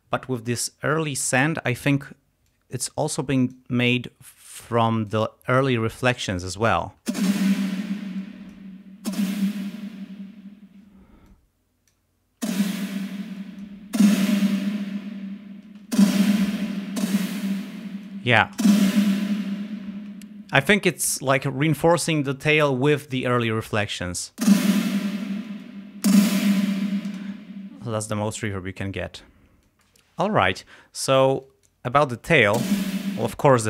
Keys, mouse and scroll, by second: 2.5-3.8 drag, 4.4 click, 7.1 space, 7.8 space, 8.3 click, 9.0 space, 10.0 space, 11.3 click, 12.4 space, 13.3 space, 13.4 click, 13.9 space, 15.8 space, 16.7 click, 17.7 space, 17.9 click, 18.6 space, 20.0 space, 23.9 click, 24.4 space, 25.3 space, 25.5 click, 26.1 space, 27.1 space, 28.2 click, 29.0 click, 32.6 space.